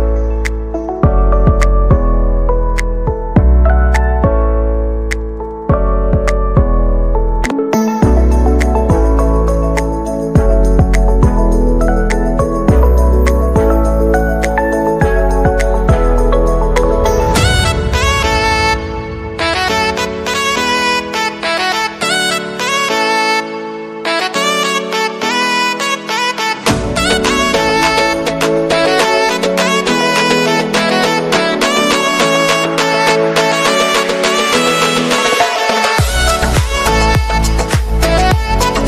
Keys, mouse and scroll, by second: 0.4 right click, 0.6 right click, 0.9 right click, 1.2 right click, 1.2 right click, 1.6 right click, 7.4 right click, 10.4 right click, 12.3 right click, 13.1 right click, 13.6 right click, 14.1 right click, 14.5 right click, 15.0 right click, 16.1 right click, 17.8 right click, 17.9 middle click.